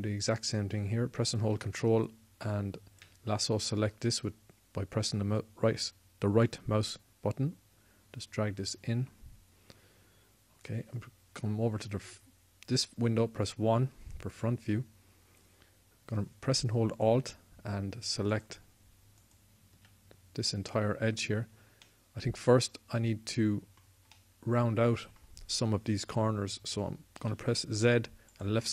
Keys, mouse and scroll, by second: 7.1-8.9 drag, 12.7 KP_1, 17.7-22.5 drag, 27.9 z.